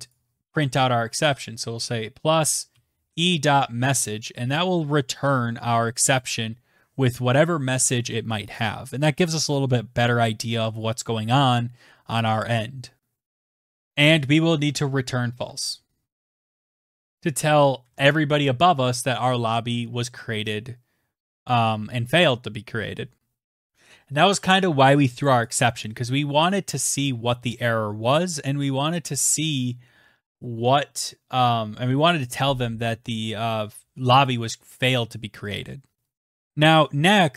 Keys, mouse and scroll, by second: 2.5 click, 4.2 click, 6.7 click, 7.1 ctrl+s, 13.4 Return, 13.9-15.5 typing, 15.9 Delete, 18.1-19.5 scroll, 21.6 click, 21.6 ctrl+s, 23.6 click, 25.2 click, 28.4 click, 32.3 click, 33.5 click, 33.6 click, 35.7 click.